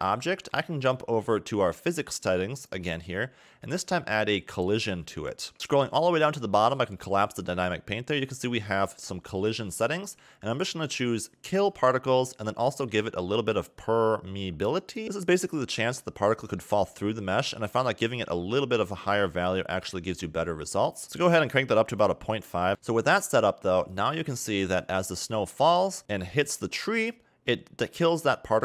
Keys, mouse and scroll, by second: 2.8 click, 5.1 click, 5.5 scroll down 1, 6.0 click, 7.5-8.2 scroll down 2, 11.5 click, 13.7 click, 16.6 middle click, 17.8 click, 19.7 a, 19.9 a, 21.0 click, 21.5 click, 23.9 click, 24.7 click, 26.0-28.1 scroll up 2.